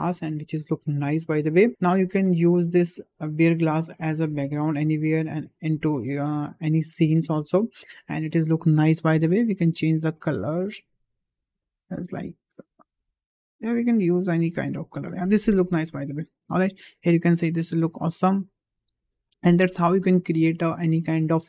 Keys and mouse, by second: 1.7 KP_0, 2.6 middle click, 7.7 KP_0, 9.2 click.